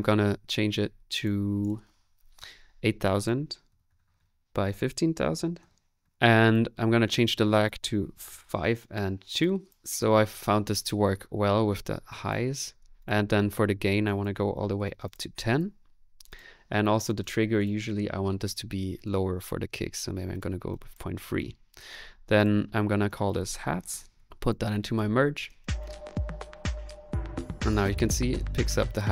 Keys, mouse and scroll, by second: 25.4 space, 25.6 click, 27.2 middle click, 27.6 click.